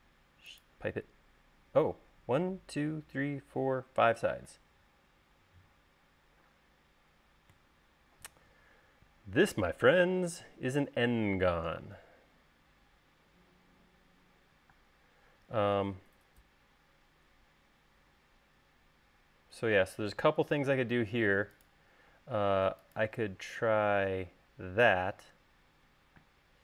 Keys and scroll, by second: 11.2 l, 15.7 space, 22.3 l, 26.4 space.